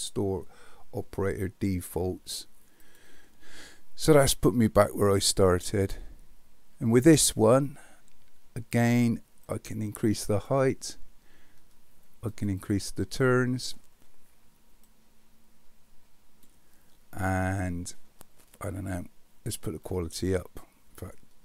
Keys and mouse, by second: 9.6 click, 12.3 click, 12.6 click, 12.8 click, 13.1 click, 15.0-16.5 drag, 20.0 click.